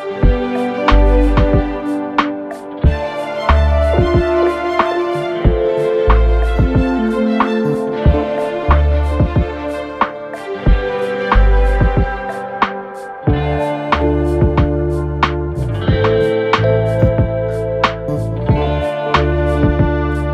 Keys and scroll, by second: 17.3 Return, 18.5 [, 20.0 ctrl+].